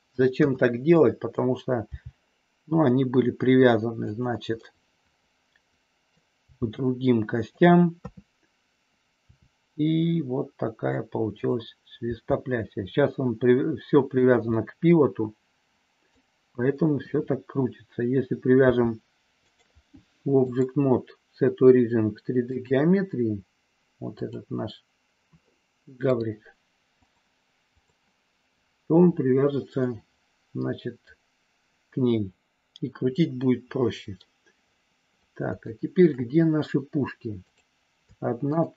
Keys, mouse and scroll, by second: 0.3 KP_1, 1.8 g, 3.9 click, 4.6-6.1 middle drag, 6.3 g, 7.3 click, 7.9 KP_3, 9.2 r, 11.3 click, 12.1 g, 14.1 click, 14.5 scroll up 1, 14.6-16.1 middle drag, 16.9 KP_1, 18.6 g, 19.5 click, 20.5-22.7 drag, 24.1 click, 26.2-27.8 drag, 29.7-34.2 middle drag, 35.6 shift+middle click.